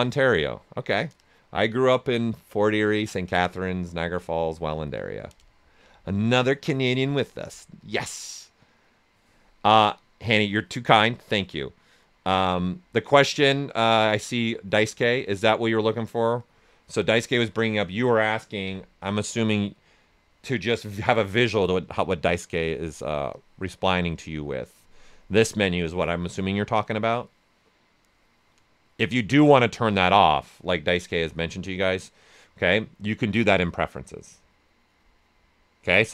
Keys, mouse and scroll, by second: 18.3-19.5 typing, 20.8-29.3 drag, 31.0 click.